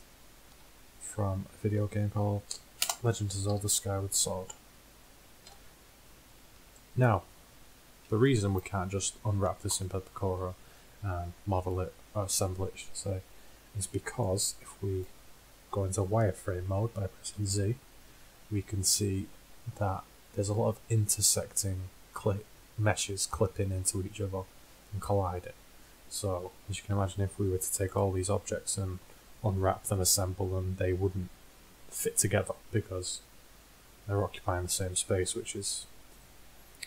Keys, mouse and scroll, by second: 0.6 r, 3.6 KP_1, 5.5 KP_5, 6.8 middle drag, 11.3 middle click, 17.4 z, 19.8-20.6 middle drag, 27.9-30.0 middle drag.